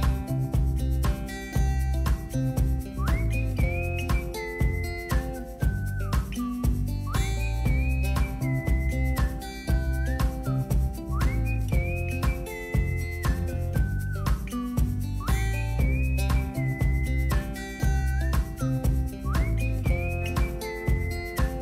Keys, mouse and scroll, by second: 0.0-2.0 drag, 3.2-11.0 drag, 13.4 click, 14.3 ctrl+click, 15.2 click, 16.8 click, 18.8-19.3 scroll down 2, 19.0 middle click, 20.0-21.6 drag.